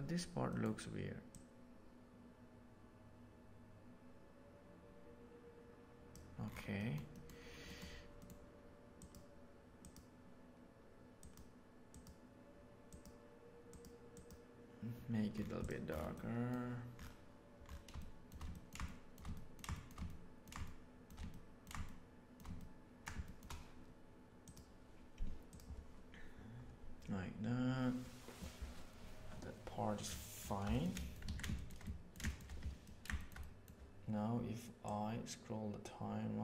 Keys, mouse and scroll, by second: 0.5 middle drag, 1.2-6.1 drag, 6.8 middle click, 7.0 middle click, 8.9 click, 9.7 click, 15.5 click, 16.1 middle click, 18.0 shift+middle click, 18.5 ctrl+middle click, 18.8-19.1 shift+middle drag, 19.3 ctrl+middle click, 19.7 shift+middle click, 20.0 ctrl+middle click, 20.6 shift+middle click, 21.3 ctrl+middle click, 21.8 shift+middle click, 22.5 ctrl+middle click, 23.2 shift+middle click, 30.6 shift+middle click, 30.9 middle click, 31.2 alt+a, 31.4-32.0 shift+middle drag, 32.8 ctrl+middle drag, 33.1-33.6 shift+middle drag, 34.8-36.4 drag.